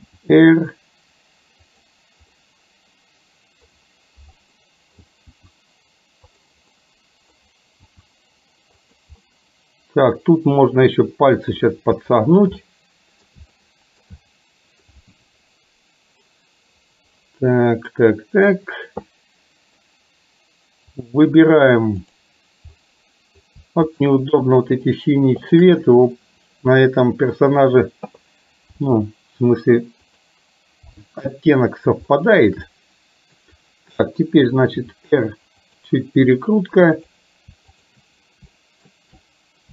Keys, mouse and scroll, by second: 0.2 r, 2.3-3.8 middle drag, 4.5 middle click, 5.4 r, 6.8 middle click, 8.0 r, 9.2-11.4 middle drag, 12.0 shift+middle click, 12.8 middle click, 13.5 shift+middle click, 14.3 middle click, 17.5-18.5 middle drag, 19.2 middle click, 20.9 click, 22.3 click, 22.8 middle click, 24.9 shift+click, 25.5 shift+click, 26.3-27.7 middle drag, 28.8 r, 31.0 middle click, 32.2 shift+middle click, 32.8-33.8 middle drag, 34.9 r, 37.8 click, 38.7 shift+middle click.